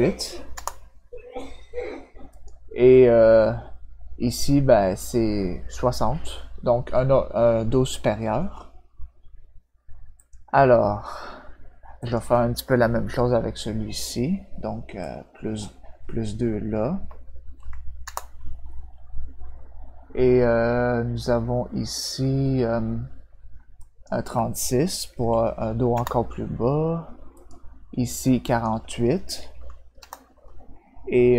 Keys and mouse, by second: 2.3 click, 10.1 click, 12.0 click, 15.0 click, 23.8 click, 25.9 Return, 27.3 click, 28.4 click, 29.9 Return.